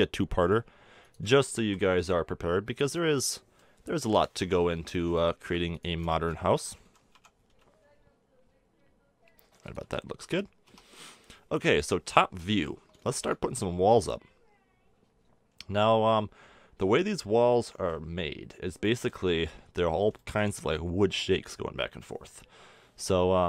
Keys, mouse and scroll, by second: 1.6 a, 1.9 Tab, 4.3 Tab, 6.8 g, 9.8 a, 10.1 Tab, 10.6 Tab, 10.6 middle click, 11.5 KP_7, 18.8-23.4 middle drag.